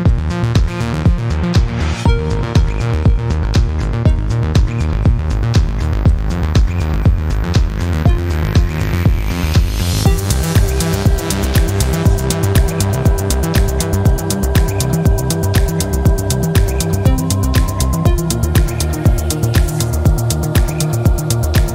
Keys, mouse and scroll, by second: 0.4 click, 1.2-1.6 scroll up 1, 2.3 scroll down 1, 3.9 click, 12.4 click, 12.8 click, 14.0 click, 15.9 click, 19.5 click, 21.6 right click.